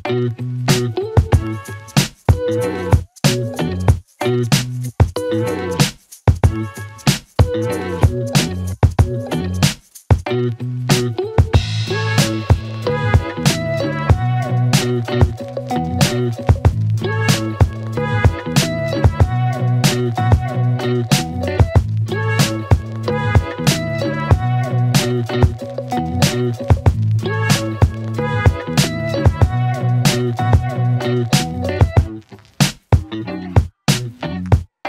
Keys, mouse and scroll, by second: 6.8 click, 10.2 click, 16.4 click, 19.7 click, 21.3-23.8 click, 26.2 ctrl+d, 27.1 click, 29.5 click.